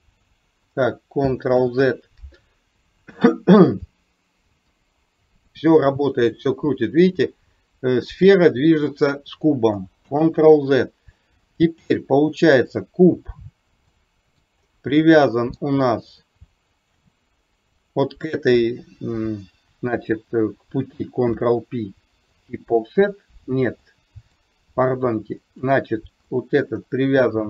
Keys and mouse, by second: 1.6 ctrl+z, 3.7 click, 4.7-9.2 drag, 10.1 ctrl+z, 12.7 click, 14.1-14.5 middle drag, 15.3 middle click, 16.8 shift+click, 21.2 ctrl+p, 23.9-24.5 middle drag, 26.5 middle drag.